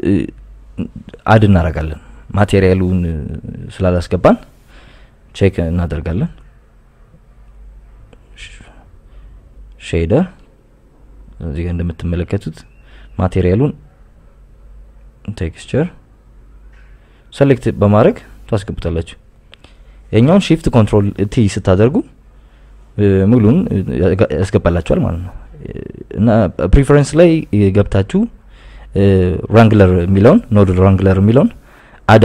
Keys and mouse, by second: 0.1 KP_5, 0.6 KP_Enter, 8.8 click, 10.0-11.9 drag, 12.6 n, 13.6 click, 22.2 click, 26.9 KP_Add, 27.1 KP_Add, 28.4 click, 29.6 KP_Subtract, 29.7 KP_Subtract.